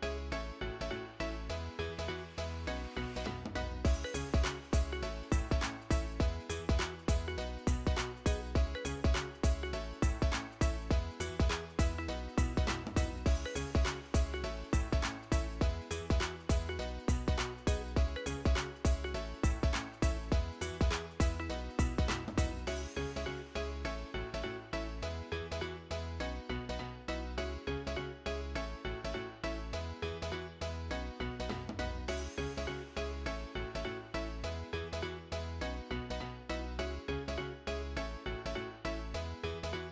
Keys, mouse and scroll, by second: 6.4-7.3 typing, 9.4 double click, 13.5 double click, 14.1-14.9 typing, 19.2 double click, 19.7-20.5 typing, 26.0 double click, 26.4-27.3 typing, 32.3 double click, 32.7-33.7 typing, 39.3 double click.